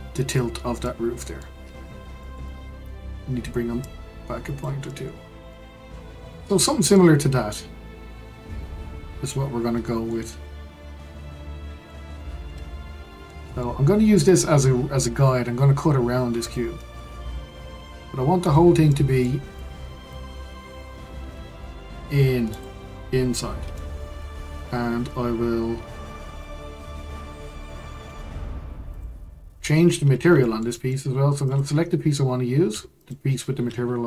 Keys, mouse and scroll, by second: 0.8-1.6 middle drag, 1.6-2.2 scroll down 8, 2.2-3.8 shift+middle drag, 3.8 click, 4.9-5.7 middle drag, 5.7-6.0 scroll up 5, 6.3-12.7 middle drag, 12.7-13.2 scroll up 1, 13.2-17.2 middle drag, 17.2 Tab, 18.9 middle click, 19.5 click, 21.2 g, 23.7-26.8 middle drag, 28.0 Tab, 28.9 click, 29.7-30.1 scroll down 2, 30.1-30.4 scroll up 2, 30.4-31.4 shift+middle drag, 31.4 click, 33.0 shift+click.